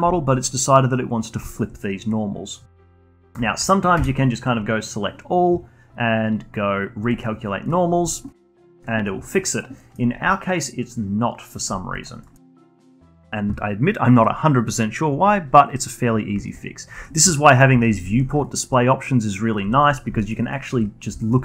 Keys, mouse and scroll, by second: 0.1-2.1 alt+drag, 2.1-2.8 scroll down 3, 2.8 alt+click, 3.1 scroll down 1, 3.4 alt+click, 3.9 a, 4.4-4.7 scroll up 4, 7.0 click, 7.8 scroll down 1, 8.1-8.6 alt+middle drag, 8.6-9.0 alt+drag, 9.0 alt+middle click, 9.4-9.7 alt+drag, 9.7 alt+middle drag, 10.0 scroll up 5, 10.2-11.7 alt+drag, 11.7 scroll down 2, 11.9 alt+click, 12.2 alt+middle click, 12.4 alt+click, 16.3 alt+drag, 16.6-17.0 scroll down 1, 17.0-18.4 alt+middle drag, 18.4-19.4 alt+drag, 19.4 scroll up 1, 19.7 alt+click, 20.2-20.9 alt+middle drag, 20.9 scroll up 1, 21.2-21.4 alt+middle drag.